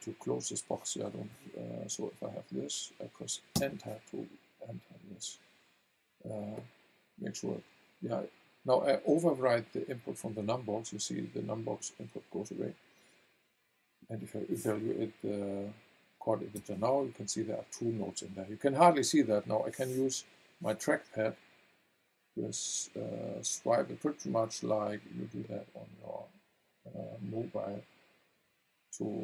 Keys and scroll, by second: 1.3 Right, 3.5 Return, 16.5 v.